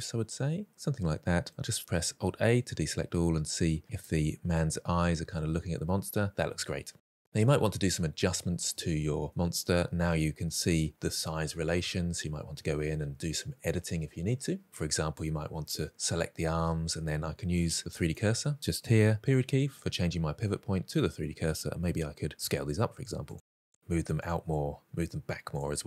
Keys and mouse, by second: 2.1 alt+a, 2.6-3.2 middle drag, 4.4-6.1 middle drag, 6.5 shift+middle drag, 6.9-8.1 middle drag, 8.3 shift+middle drag, 9.3 middle drag, 11.4 middle drag, 13.9-14.3 middle drag, 14.6 click, 17.5 shift+right click, 21.3 middle drag, 22.3 s, 23.0 middle click, 23.4 r, 24.2 middle click, 24.8 r, 25.5 drag, 25.7-25.8 middle drag.